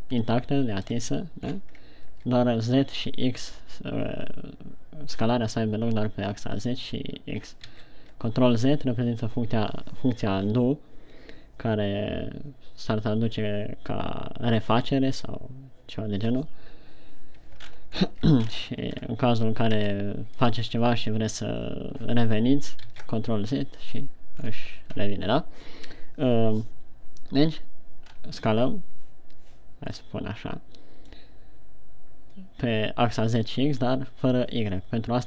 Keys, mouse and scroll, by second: 1.3 KP_1, 1.9-2.3 scroll down 5, 8.2 ctrl+z, 18.0-18.5 ctrl+scroll up 4, 18.5 ctrl+scroll down 3, 18.9-19.4 shift+scroll up 3, 20.3 s, 20.8 click, 23.3 ctrl+z, 24.8 scroll down 4, 25.3 scroll up 1, 28.4-29.9 scroll up 2, 30.6 middle click.